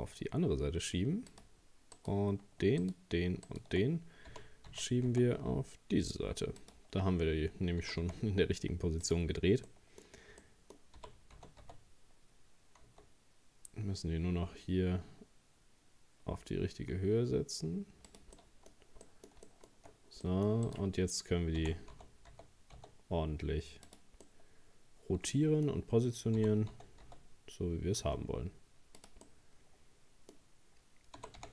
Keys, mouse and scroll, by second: 2.0 right click, 2.8 shift+right click, 3.5 shift+right click, 4.3 g, 7.8 g, 9.7-11.0 middle drag, 11.0 g, 18.4 middle click, 18.7-19.1 scroll up 2, 19.1 middle click, 19.9-20.2 shift+scroll up 1, 20.2 middle click, 20.7 right click, 21.6 r, 24.2-26.4 middle drag, 26.4 g, 29.3-31.2 middle drag, 31.2 g.